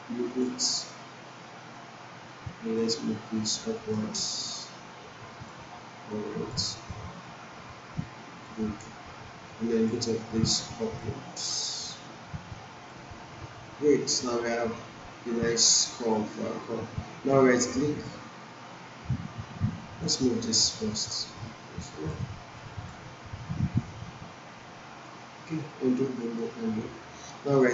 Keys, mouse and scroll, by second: 13.5-13.9 scroll down 1, 14.0 alt+middle click, 19.8-22.1 drag, 25.5 ctrl+z, 26.4 ctrl+z, 27.5-27.7 right click.